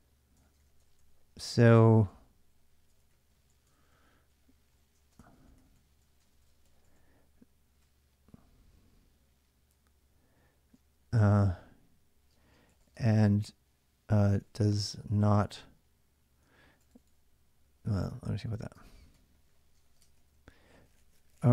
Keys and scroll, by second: 0.2 ctrl+[, 0.4-10.9 typing, 0.6 Return, 3.5 ctrl+[, 3.7 ctrl+j, 12.1-20.1 typing.